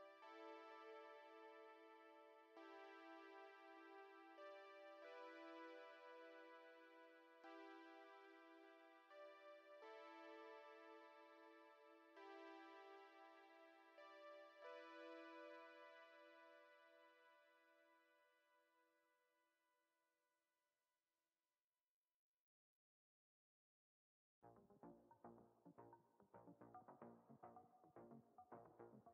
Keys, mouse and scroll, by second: 0.1 middle click, 1.6 shift+middle click, 2.9 scroll down 1, 3.3 middle click, 11.4 click, 14.5 click.